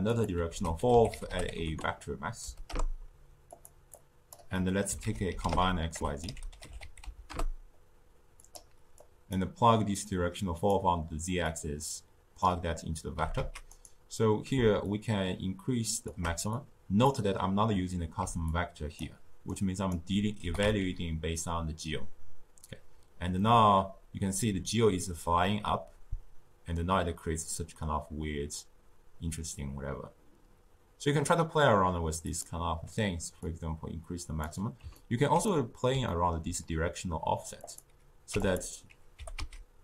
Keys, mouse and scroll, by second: 0.4 ctrl+a, 3.8 click, 4.4 middle click, 4.9 ctrl+a, 8.9 click, 9.8-11.4 drag, 13.1 g, 14.8-16.5 shift+drag, 18.1-20.3 typing, 18.4-18.9 drag, 19.4 right click, 33.3-34.8 drag, 34.8 scroll up 2, 34.9-37.5 ctrl+middle drag, 37.5 click, 39.1 g.